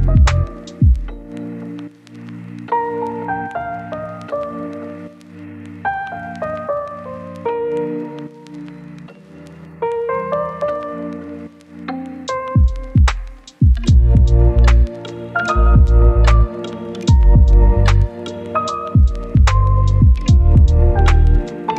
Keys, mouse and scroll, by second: 2.3 scroll up 1, 2.5 click, 2.7 scroll down 2, 2.8 right click, 3.0 scroll up 1, 3.0 right click, 3.1 scroll down 1, 3.2-3.5 scroll up 2, 3.2 right click, 3.7 click, 4.1 right click, 4.6 click, 4.7 scroll down 1, 4.8 right click, 5.4 scroll up 1, 5.6 scroll down 1, 5.7 right click, 5.9-6.4 scroll up 2, 6.1 right click, 6.4 scroll down 1, 6.5 scroll up 1, 6.8 click, 6.9-17.3 scroll down 1, 17.3 scroll up 1, 17.5 right click, 17.8 scroll down 1, 17.9 scroll up 1, 18.1 right click, 18.9 click, 19.7 scroll down 1, 19.9 scroll up 1, 20.5 right click, 20.8 click.